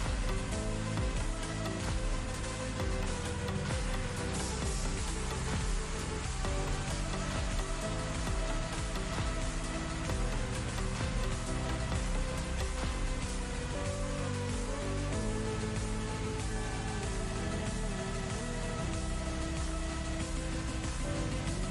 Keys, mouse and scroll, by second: 0.6 click, 4.6 click, 6.3 click, 7.3-9.1 drag, 10.5-13.3 drag, 13.5 click, 16.3 click, 17.0 super+d, 17.3-18.1 drag, 18.8 right click, 18.8 click, 19.3-19.9 click, 21.0 ctrl+t, 21.0 ctrl+click, 21.3 ctrl+alt+space, 21.4-21.7 alt+drag.